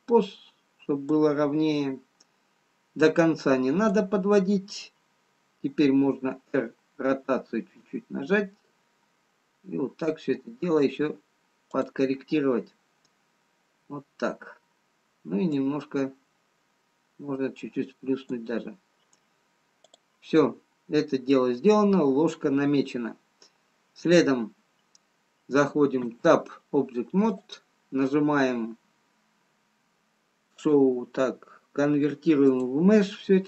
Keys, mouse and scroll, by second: 0.0 click, 1.5 click, 6.5 r, 16.0 click, 20.5 click, 21.3-22.8 scroll up 2, 23.4-24.5 scroll down 1, 26.6 Tab, 27.8 click.